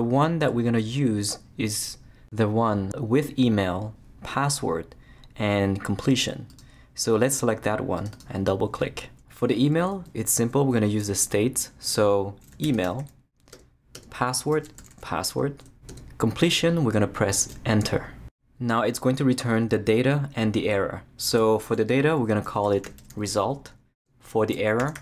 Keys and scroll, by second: 12.3-15.8 typing, 13.5 Tab, 15.9 Tab, 17.4 Return, 22.2-25.0 typing, 24.0 Tab.